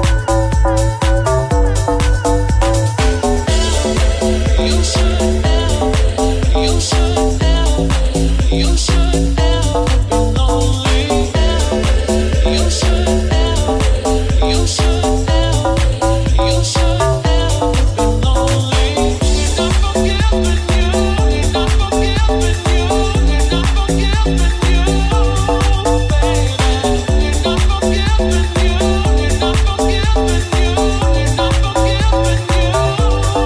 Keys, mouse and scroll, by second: 0.3 ctrl+z, 4.3 Tab, 7.9 s, 9.6 alt+z, 13.5 alt+shift+right click, 13.8 alt+shift+right click, 15.6 alt+z, 16.7 alt+z, 18.2 alt+shift+right click, 18.2 alt+shift+middle click, 18.7 alt+shift+right click, 18.8-19.9 alt+shift+middle drag, 19.3 ctrl+z, 19.9 right click, 19.9 middle click, 20.5 right click, 20.5 middle click, 21.5 middle click, 21.6-23.8 middle drag, 23.8 shift+click, 23.9 shift+middle click, 24.3 shift+click, 24.4 shift+middle click, 25.3 ctrl+shift+click, 25.4-33.4 ctrl+alt+shift+middle drag, 25.7 ctrl+alt+z, 27.3 s, 31.0 Tab.